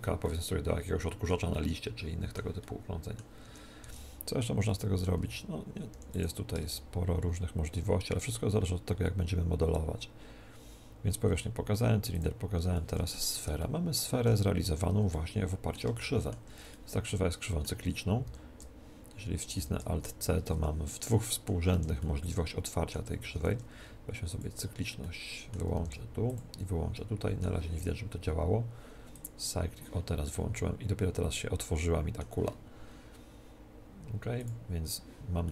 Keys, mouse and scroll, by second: 3.4 Tab, 3.8 Tab, 5.1 z, 5.9 x, 6.7 shift+a, 12.7-18.6 middle drag, 13.3 Tab, 14.3 a, 18.2 alt+c, 19.5 alt+c, 20.5 Escape, 20.8-23.7 middle drag, 21.7 z, 23.3 alt+c, 25.0 middle click, 25.7 alt+c, 25.7-26.7 drag, 26.7-28.9 middle drag, 29.1-31.1 drag, 30.2-33.7 middle drag, 34.3-35.5 drag, 35.4-35.5 middle drag.